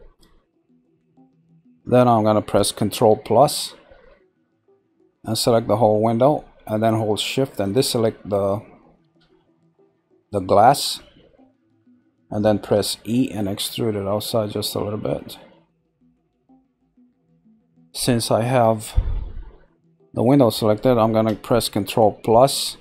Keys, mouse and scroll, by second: 7.2 shift+click, 7.6 shift+click, 9.0 ctrl+z, 9.6 shift+click, 10.2 shift+click, 10.6 shift+click, 11.4 scroll up 1, 12.8 e, 18.7-19.8 scroll.